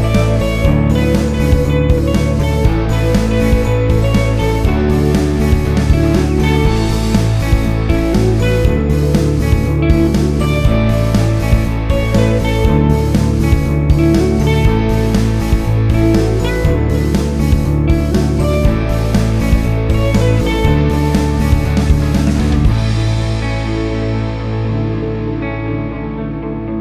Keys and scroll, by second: 4.5 1, 4.8 8, 4.9 Return, 21.2 ctrl+z.